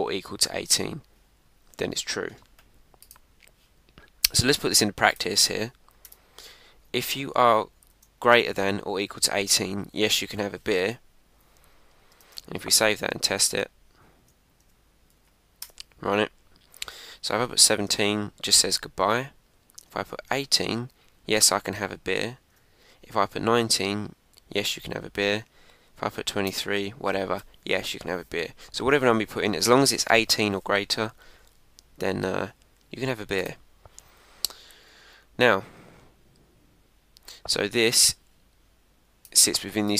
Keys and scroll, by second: 7.8 shift+., 9.6 Down, 12.2 super+s, 12.7 super+Tab, 13.5 super+Tab, 14.1 Up, 14.6 Return, 15.1 Up, 15.6 Return, 18.6 Up, 19.0 Return, 22.1 Up, 22.5 Return, 24.7 Up, 25.2 Return.